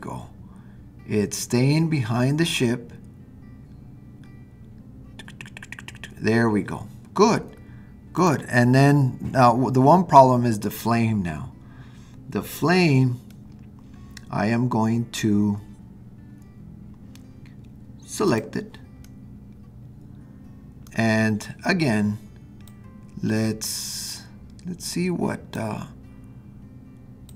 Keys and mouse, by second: 13.4-18.3 middle drag, 18.3 click, 19.0-20.2 middle drag, 20.3-21.2 middle drag, 25.3-25.7 drag, 27.3 click.